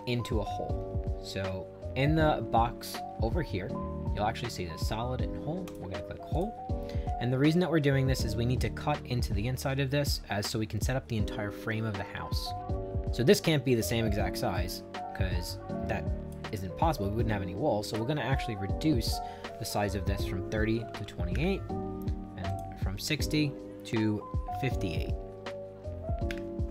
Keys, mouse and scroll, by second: 5.7 click, 6.3 click, 12.8-16.3 drag, 17.9 click, 19.0 click, 20.5-21.5 typing, 22.5 click, 24.3-25.3 typing, 26.3 Return.